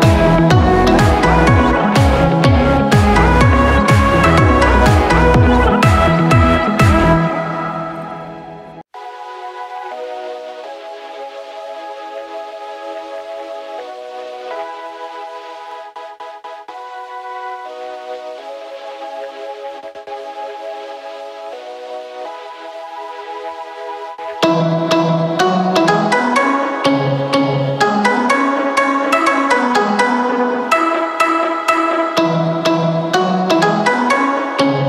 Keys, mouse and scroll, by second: 27.9 right click.